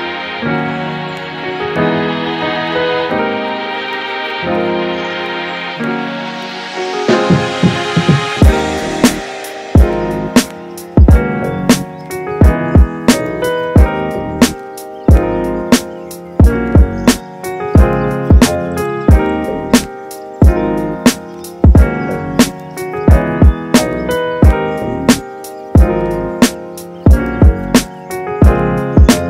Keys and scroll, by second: 27.6 super+s, 28.3 Right, 28.4 BackSpace, 28.6 7, 28.7 Return.